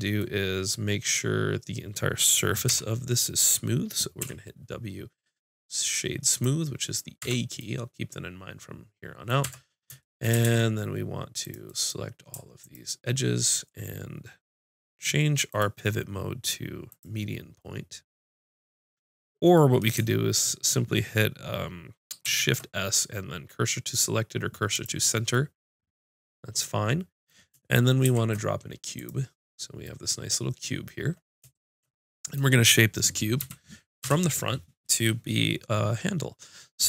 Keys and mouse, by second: 2.7 l, 4.2 w, 7.2 Tab, 9.5 Tab, 10.5 ctrl+Tab, 12.6-17.6 drag, 17.8-19.3 middle drag, 22.3 shift+s, 28.1 shift+a, 33.4 KP_3, 34.0 KP_5.